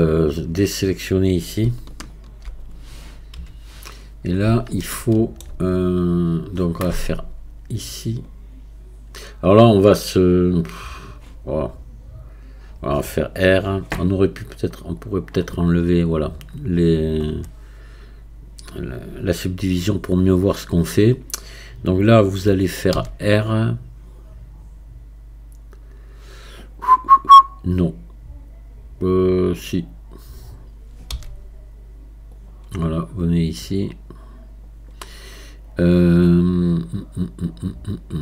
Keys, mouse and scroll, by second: 1.9-4.3 shift+drag, 4.3-4.9 scroll up 2, 4.9-7.9 shift+middle drag, 15.0 click, 15.8 scroll up 1, 31.1 r, 33.7-38.2 drag.